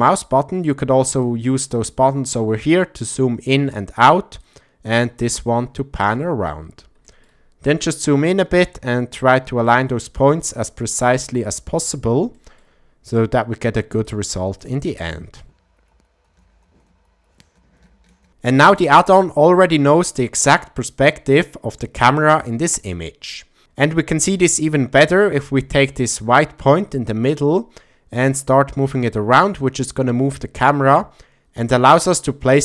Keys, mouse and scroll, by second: 1.2-3.7 drag, 4.4-6.5 drag, 7.0 shift+middle drag, 8.1 click, 9.7-10.4 shift+middle drag, 11.0 shift+middle click, 12.3 shift+middle drag, 14.2 click, 15.1-15.4 shift+middle drag, 15.7 click, 16.0 click, 16.3 shift+middle click, 16.7 shift+middle click, 17.0 click, 17.5 shift+middle click, 17.8 ctrl+middle click, 18.1 shift+middle click, 27.2-32.6 drag.